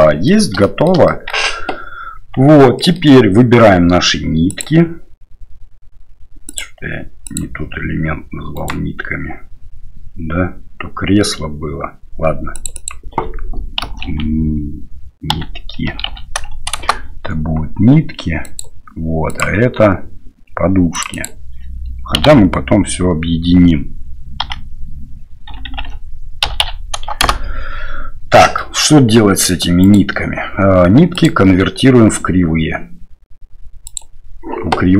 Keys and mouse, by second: 0.0 middle click, 0.6 shift+middle click, 1.0 middle click, 2.4 Tab, 2.7 click, 8.5 right click, 28.4 middle click, 29.8 right click.